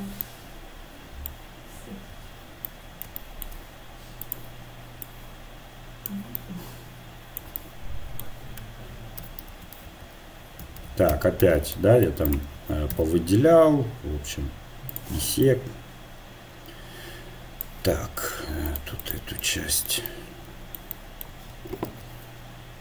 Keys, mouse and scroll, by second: 1.8 a, 2.1 a, 2.7-4.2 middle drag, 4.2-6.1 drag, 6.4 middle click, 9.2 s, 12.6 a, 12.9 a, 14.9-17.6 drag, 18.7-20.9 drag, 21.7 a, 21.9 a.